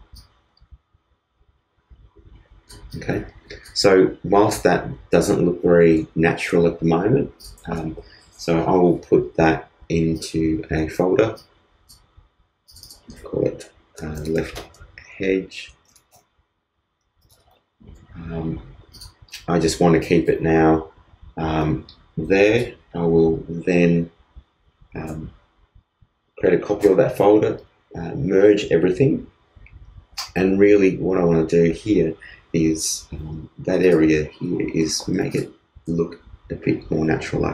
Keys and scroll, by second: 13.8-14.7 typing, 15.8 shift+h, 26.7 super+e.